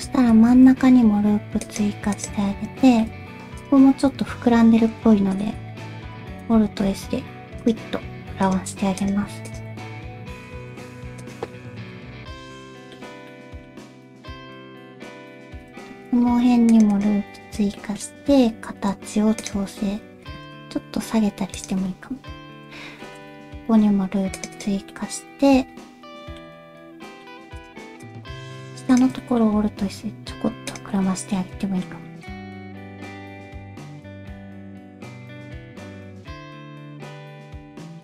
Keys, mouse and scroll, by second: 0.5 ctrl+r, 2.9 shift+middle click, 3.6 click, 6.7 alt+s, 7.9 g, 11.2 g, 11.5 middle click, 12.2 alt+z, 12.5 middle click, 13.4 middle click, 13.9 shift+middle click, 14.2 g, 15.3 shift+middle click, 15.5 ctrl+r, 17.9 shift+middle click, 20.2 g, 23.0 ctrl+r, 24.9-26.4 middle drag, 27.1 middle click, 28.3 middle click, 29.2 middle click, 29.7 alt+s, 31.0 middle click, 31.7 middle click, 33.5 middle click, 34.6 alt+s, 34.6 click, 35.6 alt+s, 35.6 middle click, 35.9 shift+middle click, 36.5 alt+s, 37.8-38.0 middle drag.